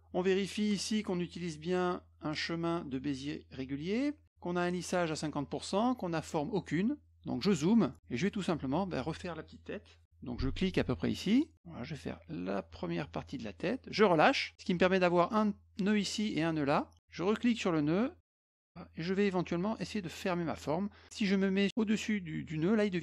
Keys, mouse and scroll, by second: 7.6 middle click, 7.9 middle click, 11.1-13.9 drag, 17.8-23.0 drag.